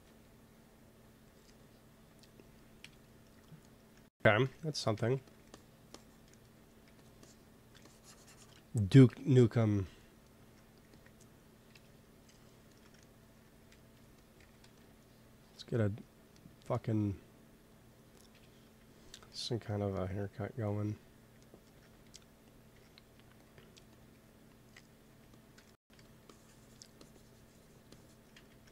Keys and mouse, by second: 0.5-3.8 drag, 2.7 KP_1, 4.8 x, 5.0 f, 5.4-8.0 drag, 6.7 f, 9.0 KP_1, 10.8 ctrl+s, 11.9 KP_1, 13.5 f, 14.3 g, 14.6 f, 14.9-18.2 drag, 18.2 KP_1, 22.7 t, 23.4-24.7 drag, 24.0 t, 24.7 middle click, 25.0 f, 25.9 f, 26.3-27.6 drag, 28.3 ctrl+z.